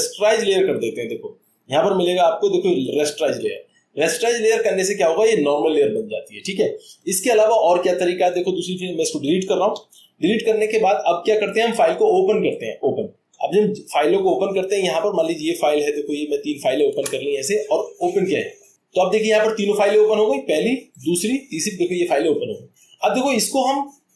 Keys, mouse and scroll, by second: 4.9 click, 8.3-9.4 drag, 9.7 Delete, 11.6 click, 18.8 click, 21.0 click, 21.6 click.